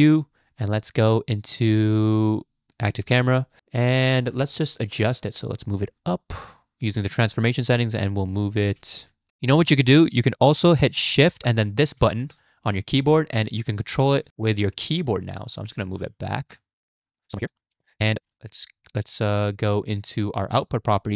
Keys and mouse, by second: 5.2-6.2 drag, 6.2 middle click, 6.9 click, 7.7 click, 8.9 ctrl+z, 12.0 shift+`, 19.4 click.